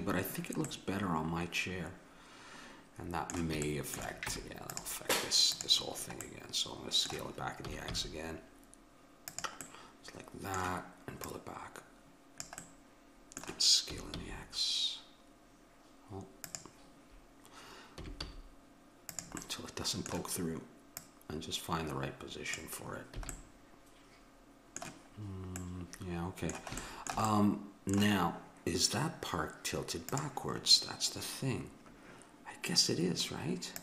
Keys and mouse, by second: 0.7-2.5 middle drag, 3.7 middle click, 4.3 Tab, 4.9 Tab, 5.6-7.3 drag, 7.7 s, 11.3-12.9 drag, 12.9-16.5 middle drag, 14.0 s, 18.0 s, 19.4-21.0 middle drag, 21.0-22.9 drag, 23.2 a, 23.3-25.9 middle drag.